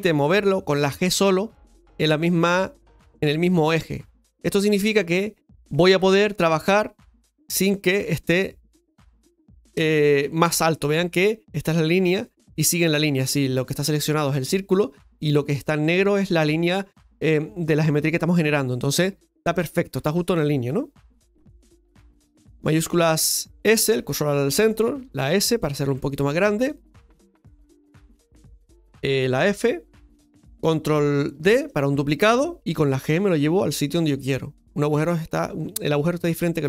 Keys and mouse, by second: 6.3-9.1 middle drag, 25.6 s.